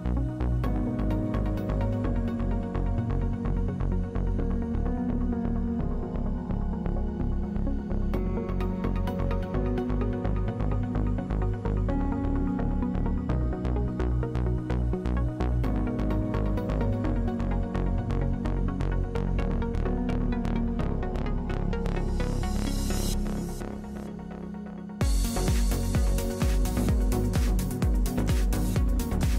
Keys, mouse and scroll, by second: 0.3 KP_7, 1.0 middle click, 3.4 middle click, 7.3-13.1 drag, 13.4-17.2 middle drag, 17.2-18.5 drag, 18.5-20.4 middle drag, 20.4-24.1 drag.